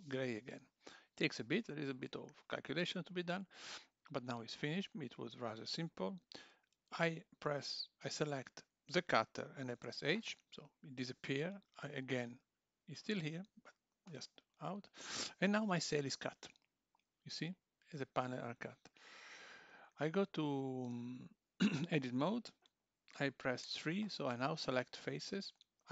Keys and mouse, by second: 4.2 click, 8.1 click, 9.8 h, 12.7 click, 19.4 Tab, 23.6 3, 24.7 click.